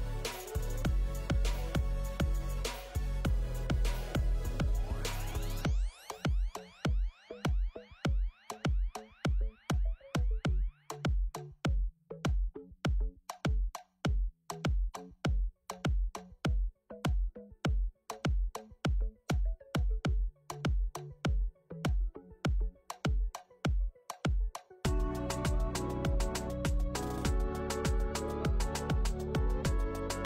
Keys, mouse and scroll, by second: 0.0 click, 0.5 click, 2.1 click, 3.1 middle click, 3.5 click, 4.1 click, 5.1 click, 5.2 middle click, 6.0 ctrl+s, 6.5 click, 7.7 click, 9.9 scroll up 1, 9.9 KP_1, 12.0 click, 12.6 click, 13.2 click, 13.8 Tab, 14.2 a, 14.6 a, 14.9 g, 21.7 click, 22.0 Tab, 22.2 click, 22.6 scroll up 1, 22.7 scroll down 1, 23.0 scroll down 2, 23.1 shift+middle click, 25.4 click, 25.6 click, 26.4 ctrl+right click, 26.8 click, 27.0 Delete, 27.2 scroll down 2, 27.4 scroll up 1, 27.7 shift+middle click, 28.6 scroll up 1, 28.8 click.